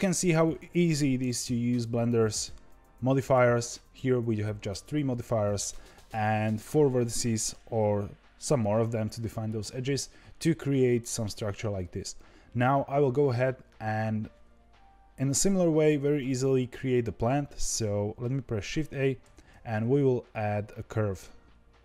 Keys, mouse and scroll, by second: 0.6-1.8 scroll down 1, 3.2 click, 13.6-16.6 scroll down 2, 16.6-16.9 scroll down 1, 19.2 shift+a.